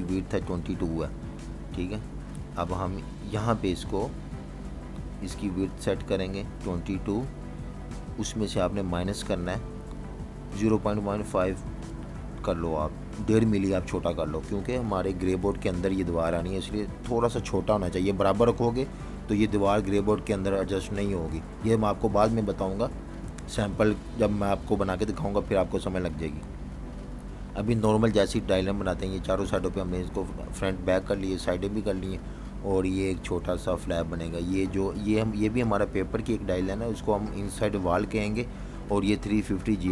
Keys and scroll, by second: 7.2 typing, 8.5 typing, 9.9-11.7 typing, 14.7 BackSpace, 15.2 8, 17.7 Return, 21.2 v, 21.3 space, 33.6 2, 33.8 Return, 35.4-36.8 typing, 37.8 typing.